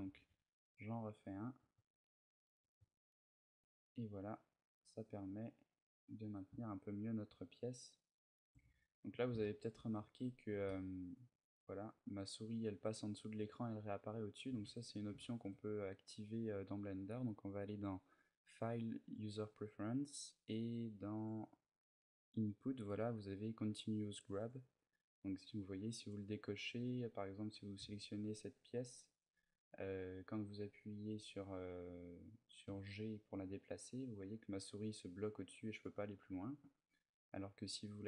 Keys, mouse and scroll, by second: 8.1 shift+click, 8.4 a, 8.6-9.1 scroll down 1, 9.1 shift+middle click, 9.1-10.3 scroll down 5, 10.3 ctrl+r, 10.3-10.7 scroll down 1, 13.9 right click, 14.3 ctrl+z, 14.9 shift+middle click, 27.5 a, 31.0 right click, 32.4 g, 35.5 right click, 36.0 a, 37.3 click.